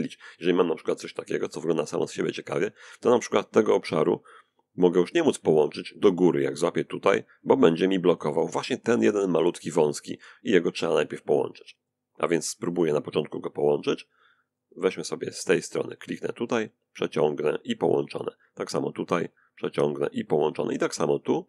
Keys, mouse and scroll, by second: 2.9-4.5 drag, 5.9-7.5 drag, 10.8-11.9 drag, 12.8-13.9 drag, 15.2-16.6 drag, 18.0-19.3 drag, 20.1-21.4 drag.